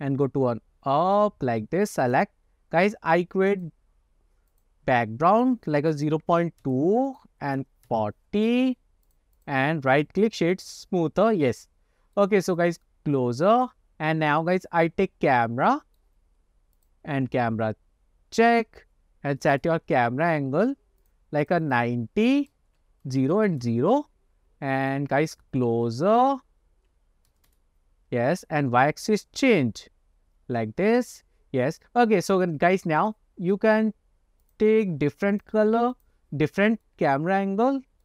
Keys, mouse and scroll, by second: 0.2-1.3 drag, 2.1 click, 3.6-4.7 drag, 5.5-6.7 drag, 7.2 click, 9.1 click, 10.0 right click, 11.5-12.3 middle drag, 12.6-13.8 drag, 14.0 scroll up 3, 14.5-16.2 middle drag, 16.8-18.7 drag, 19.7 ctrl+alt+KP_0, 21.1 click, 21.7-23.8 drag, 24.9-27.6 drag, 28.7-31.4 drag, 33.0 click, 34.5 click, 35.4 click, 36.0 click, 37.0-37.5 middle drag, 37.7 scroll up 2.